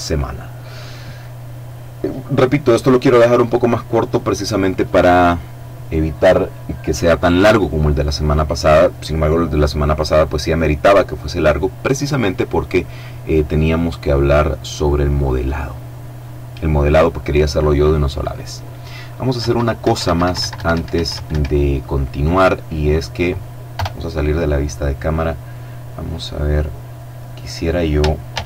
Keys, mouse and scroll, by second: 18.3 Escape, 22.6 KP_0, 24.3-24.8 scroll down 2, 24.8 middle click, 27.2 shift+a.